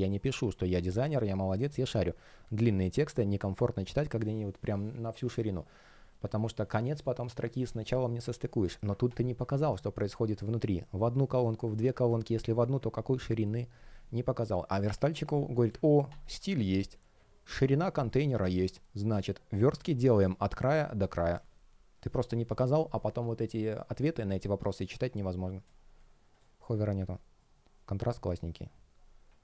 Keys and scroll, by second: 11.9 space, 16.5 space, 18.5 shift+p.